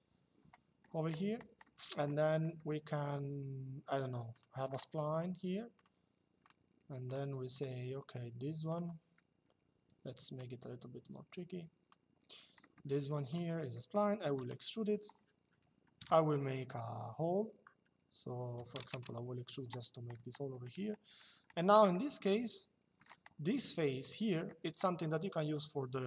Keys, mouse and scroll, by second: 1.3 middle click, 4.1 click, 5.4 click, 8.4 click, 9.7 Escape, 10.1 click, 12.3 middle click, 12.6 Escape, 13.0 click, 14.1 e, 18.3 KP_5, 18.6 Return, 21.6 shift+middle click, 23.7 click, 25.2 shift+middle click.